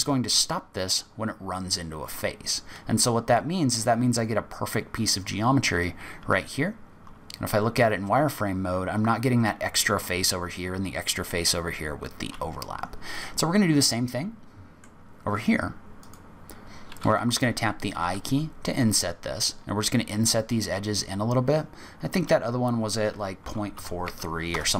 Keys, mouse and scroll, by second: 6.2 z, 8.0-8.6 scroll down 4, 8.6-9.2 scroll up 2, 11.6 z, 13.1 middle click, 16.0 click, 18.0 i.